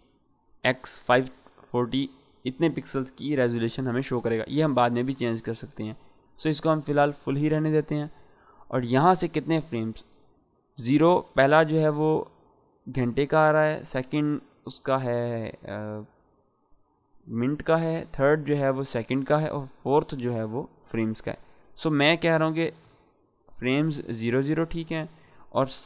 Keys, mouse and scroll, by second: 5.7-9.9 drag, 13.8-14.7 click, 17.7-18.3 drag.